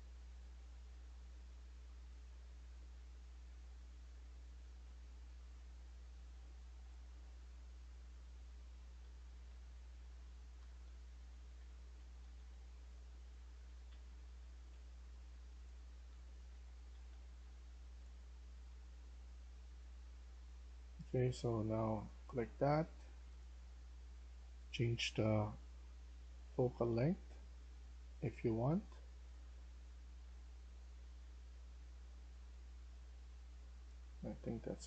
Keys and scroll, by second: 0.0-2.4 typing, 3.6-5.3 typing, 6.7-14.6 typing, 15.6-16.9 typing, 18.0 typing.